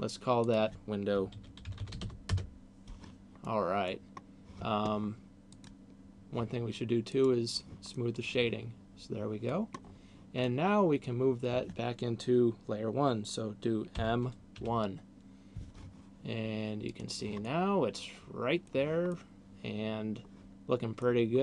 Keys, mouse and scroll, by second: 0.3 click, 3.3 middle click, 5.6 click, 7.1 click, 8.1 middle click, 9.6-10.3 scroll down 4, 10.3 middle click, 14.1 m, 16.8 click, 17.3 middle click, 19.1 middle click.